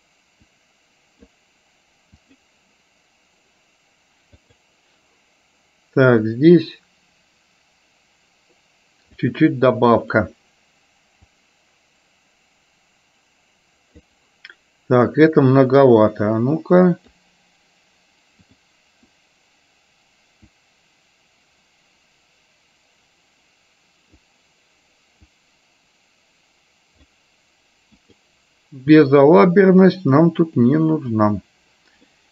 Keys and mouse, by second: 0.6 click, 4.6 click, 6.5-9.3 drag, 10.1 click, 11.5-14.2 drag, 15.7-17.2 drag, 20.7-24.3 drag, 25.5-27.2 drag, 28.1 click, 30.6 click, 31.2 click, 32.2 middle click.